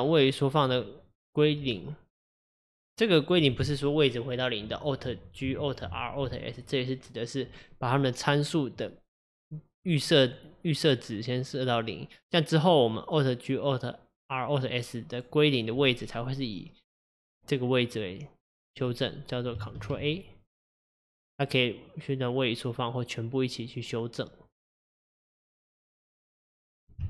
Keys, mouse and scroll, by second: 19.8 ctrl+a, 26.6 click.